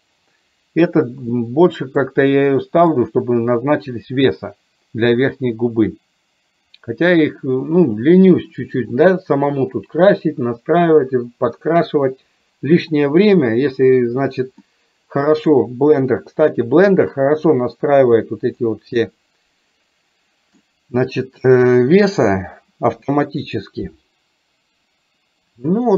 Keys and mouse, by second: 1.4 middle click, 2.3 middle click, 14.6 middle click, 19.0-20.5 middle drag.